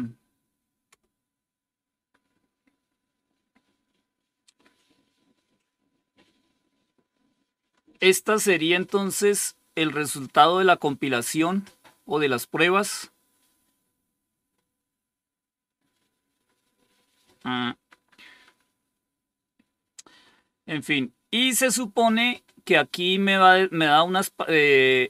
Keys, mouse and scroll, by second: 13.7-14.4 scroll up 1, 14.4-15.5 scroll up 1, 15.5-16.3 scroll up 1, 16.3-17.2 scroll down 4.